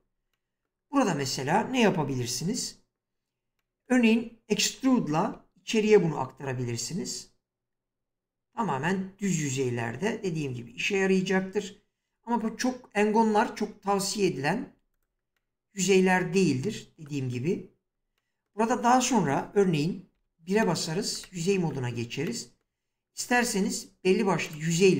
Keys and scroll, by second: 5.3 e, 20.1 1.